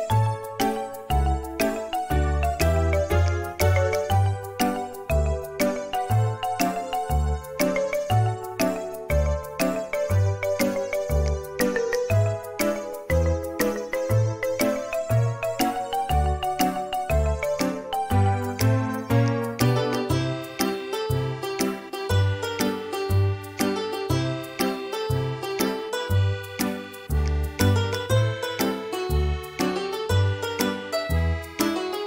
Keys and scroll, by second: 2.3 space, 4.5 m, 14.2 space, 17.5 space, 20.2 space, 23.5 typing, 26.0 space, 29.9 space.